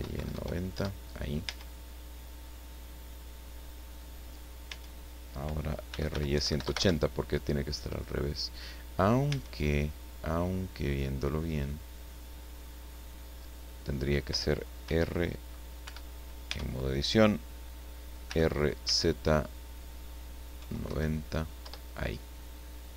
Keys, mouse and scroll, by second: 0.1 KP_9, 0.3 KP_0, 0.7 KP_Enter, 1.5 Tab, 2.0-2.3 scroll down 1, 2.5-4.5 middle drag, 4.7 Tab, 5.9-6.6 typing, 6.7 KP_Enter, 9.2 Tab, 10.9 scroll down 2, 11.6-13.8 middle drag, 14.8 r, 15.8 Escape, 18.2 r, 20.5 KP_9, 20.9 KP_0, 21.6 KP_Enter.